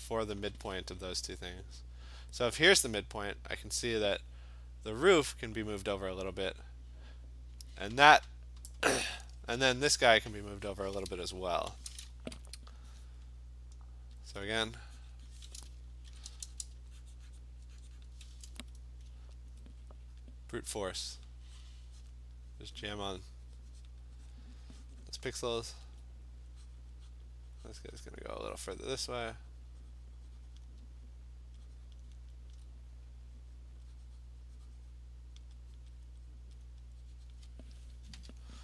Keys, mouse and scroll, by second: 8.7 click, 14.3 alt+click, 15.1 click, 15.4 click, 16.1 alt+click, 16.1 ], 16.3 ], 16.4 ], 16.6 ], 17.4 click, 18.1 click, 19.5 click, 19.5 alt+click, 20.2 click, 21.3 click, 21.7 click, 22.1 click, 22.2 alt+click, 22.4 click, 22.7 click, 23.1 alt+click, 23.2 click, 23.9 click, 24.3 click, 24.7 click, 25.1 click, 26.0 alt+click, 26.3 click, 26.8 click, 27.2 click, 28.0 click, 28.6 click, 29.1 alt+click, 30.6 click, 32.0 alt+click, 32.5-37.5 alt+click, 33.8 click, 35.4 click, 35.8 click, 36.1 click, 36.3 click, 36.6 click, 37.3 click, 37.7 click.